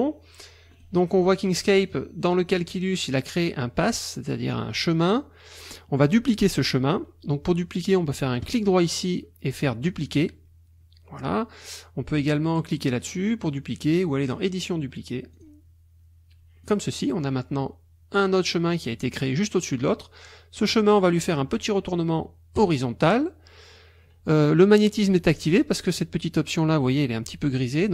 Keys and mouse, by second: 0.7 click, 8.4 click, 14.2 click, 15.3 click, 16.6 click, 22.6 click.